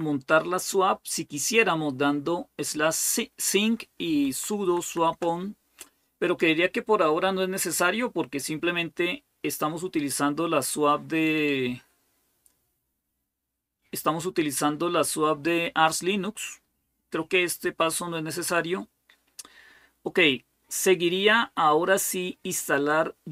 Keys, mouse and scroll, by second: 4.0 Down, 4.4 Down, 4.8 Down, 5.0 Down, 11.4-16.5 scroll down 2, 20.8-22.2 scroll down 1.